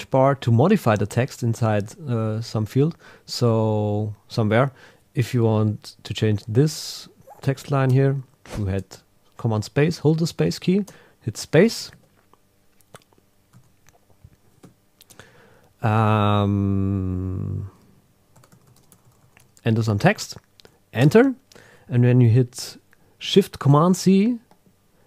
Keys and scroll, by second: 0.7 Down, 1.6 shift+super+Left, 11.9 Right, 13.5 super+a, 14.6 Right, 21.0 Return.